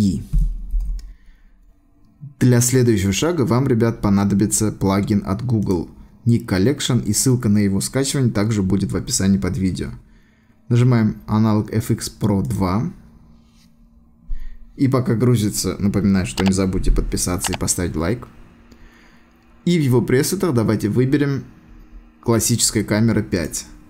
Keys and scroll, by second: 0.3 ctrl+alt+shift+e.